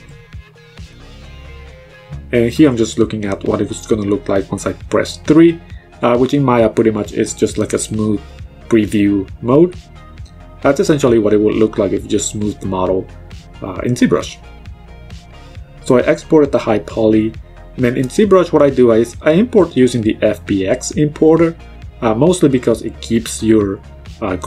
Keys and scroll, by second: 0.7 3, 1.1 1, 1.7 3, 7.9 ctrl+c, 10.7 -, 14.0 ctrl+v, 14.7 Return.